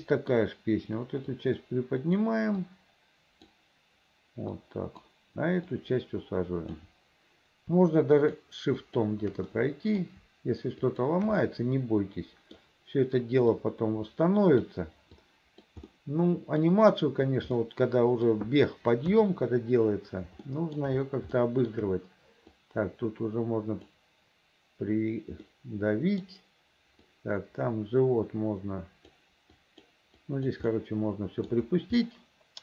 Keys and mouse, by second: 0.0 middle click, 1.5 click, 2.7 click, 4.7 click, 5.8-6.9 drag, 8.3 shift+click, 8.9 shift+click, 9.6 middle click, 11.0 shift+middle click, 11.5 middle click, 12.0 click, 13.7-14.7 drag, 15.3 click, 16.0 click, 16.0 middle click, 17.7 middle click, 19.2 KP_3, 20.6 shift+middle click, 21.5 shift+middle click, 22.7-24.0 drag, 25.6 middle click, 26.0 click, 26.1 middle click, 27.2-29.2 drag, 29.2 middle click, 29.7 click, 30.0 middle click, 30.3 click, 30.6 middle click, 30.8 click, 31.6 middle click, 32.1-32.6 drag.